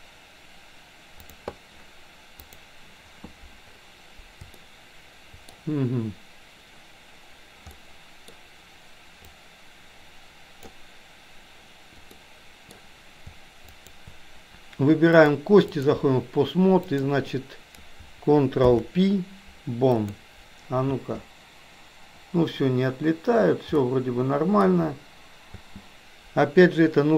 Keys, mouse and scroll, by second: 4.7-5.5 shift+middle drag, 7.9-8.4 middle drag, 9.3-10.8 drag, 12.3 middle click, 13.8 shift+click, 15.2 click, 16.9 click, 18.7 ctrl+p, 21.0 space, 23.8-24.8 middle drag, 25.7 space.